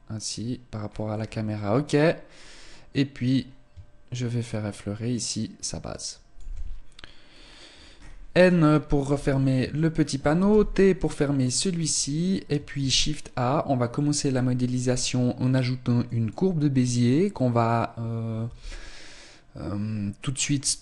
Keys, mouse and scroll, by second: 0.9-2.7 scroll up 5, 2.7 click, 2.7-3.1 scroll up 1, 7.3-9.2 scroll up 13, 8.9 n, 9.9 shift+middle click, 10.4-11.1 scroll down 3, 10.4 t, 11.1 shift+middle click, 12.8 shift+a.